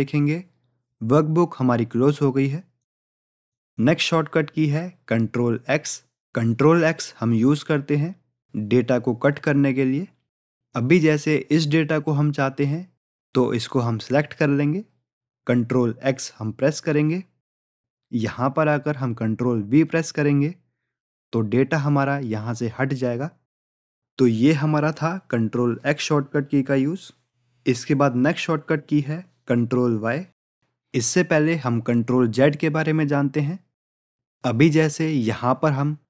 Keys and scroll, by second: 16.0 ctrl+x, 20.4 ctrl+v.